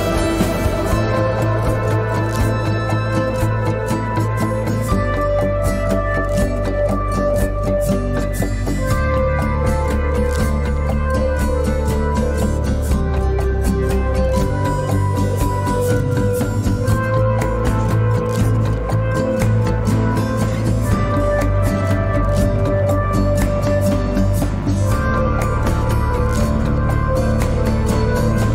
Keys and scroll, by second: 3.0 Tab, 9.6 Tab, 10.9 Tab, 13.0 Tab, 14.4 Tab, 17.1 Tab, 25.0 Tab.